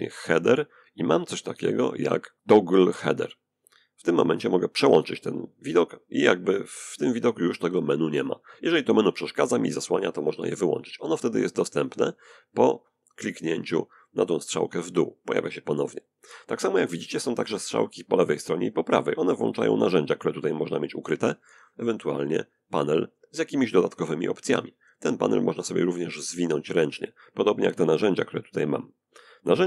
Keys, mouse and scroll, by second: 3.2 click, 13.3 click, 18.3 click, 21.7 click, 24.3-26.1 drag, 27.1-29.1 drag.